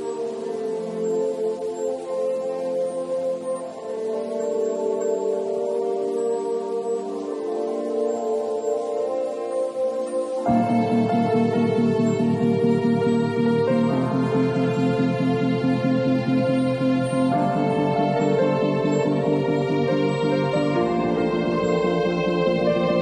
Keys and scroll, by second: 11.6 b, 15.8 [, 17.9-21.3 typing, 22.5-23.0 typing.